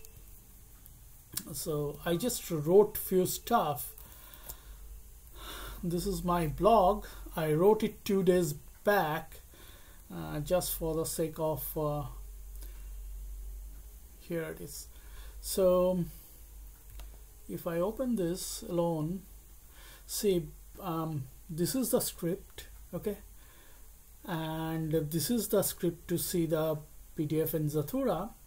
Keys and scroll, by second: 1.9 Escape, 4.3 ctrl+b, 5.6 alt+t.